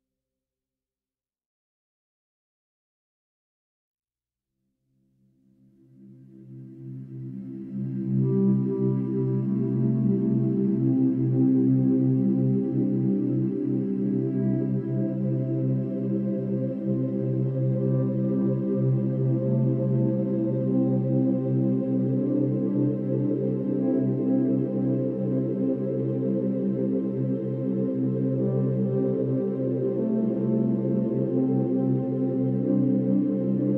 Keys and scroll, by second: 1.3 ctrl+j, 1.4 ctrl+t, 1.8 ctrl+y, 2.2 ctrl+y, 2.6 ctrl+h, 2.9 Right, 3.0 Up, 3.3 Right, 3.6 Up, 3.7 Right, 3.9 Up, 5.0 ctrl+j, 5.3 Left, 5.8 Up, 5.9 Left, 6.0 Right, 6.4 Left, 6.5 Down, 6.7 ctrl+t, 6.9 ctrl+h, 7.5 Left, 7.6 Down, 9.5 ctrl+e, 11.4 ctrl+=, 11.7 space, 14.3 space, 16.1 ctrl+z, 31.2 ctrl+d.